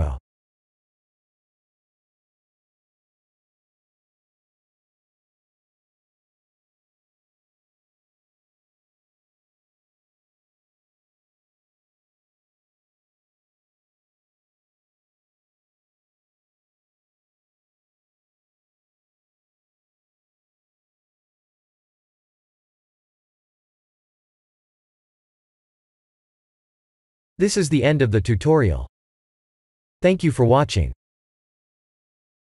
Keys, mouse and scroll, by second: 0.9 KP_0, 3.0 click, 5.2 click.